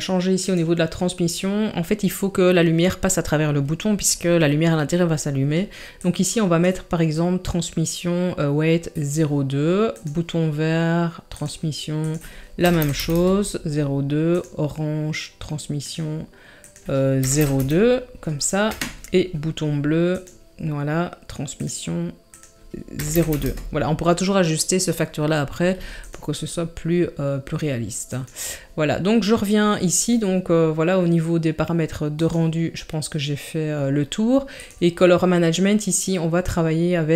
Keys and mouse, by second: 0.5 click, 6.0 click, 9.9 click, 11.4 drag, 12.1-13.1 drag, 14.3 click, 15.9 drag, 16.7-18.7 drag, 20.1 click, 21.6 click, 22.4-23.4 drag, 26.1-28.2 drag, 32.1 click, 34.5 click.